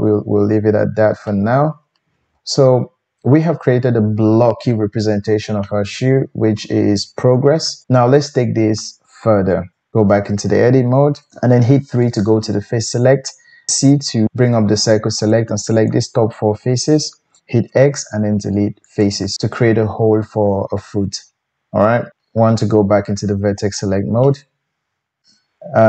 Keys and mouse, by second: 7.7 click, 7.8 Tab, 7.8-8.9 middle drag, 9.7 Tab, 11.7 3, 13.7 c, 17.7 x, 19.0 typing, 20.1-25.8 middle drag, 22.1 1.